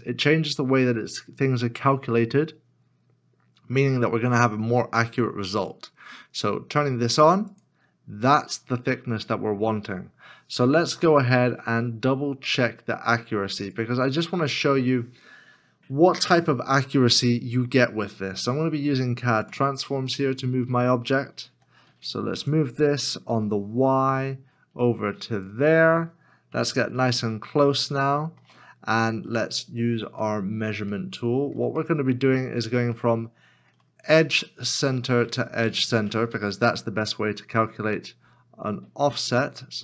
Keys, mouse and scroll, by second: 20.1 middle click, 23.3 g, 24.7 y, 26.5 KP_Decimal, 27.8 shift+middle click, 28.7-29.2 scroll up 1, 29.4 shift+middle click, 30.3 middle click, 30.9 shift+middle click, 32.0 shift+middle click.